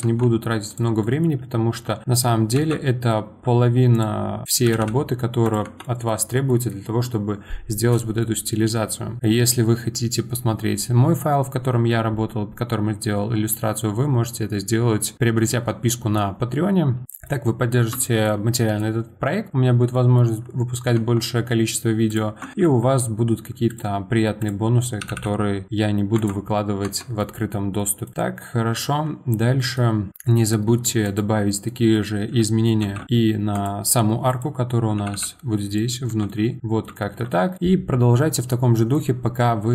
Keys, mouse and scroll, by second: 0.0 Tab, 0.7 click, 1.0-2.5 middle drag, 2.5 ctrl+shift+b, 4.4 click, 4.6 g, 5.6 Tab, 5.8-6.2 middle drag, 6.2 scroll down 1, 6.5-11.8 middle drag, 17.0-21.0 middle drag, 21.0 Tab, 21.4-22.1 scroll up 2, 22.1 click, 22.5 ctrl+shift+b, 24.4 click, 25.0 g, 26.8 Tab, 27.2-27.6 middle drag, 27.6 scroll down 2, 27.8 middle click, 28.7 click, 29.3-30.1 middle drag, 30.1 Tab, 31.0 click, 31.7-32.8 middle drag, 32.8 ctrl+shift+b, 34.3 click, 35.0 g, 36.1 Tab, 36.3-37.6 middle drag, 37.6-38.7 scroll down 1, 38.7-39.7 middle drag.